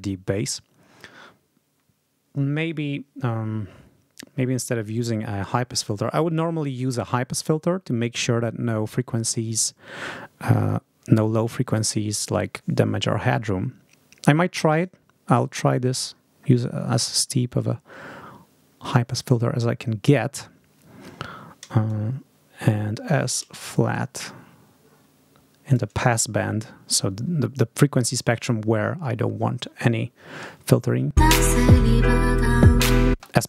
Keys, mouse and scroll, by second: 14.6 click, 16.0-16.5 scroll up 2, 18.6 scroll up 2, 19.9 scroll up 2, 21.7-23.4 shift+drag, 23.8-25.8 drag, 31.0 space, 33.0 space.